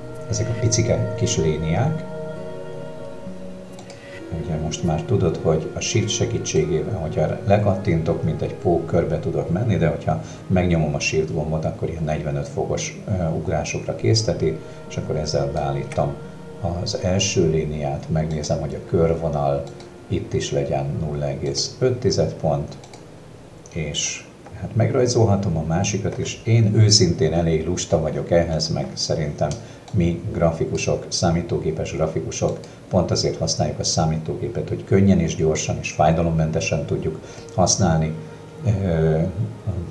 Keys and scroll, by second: 28.5 ctrl+KP_Subtract, 30.8 space.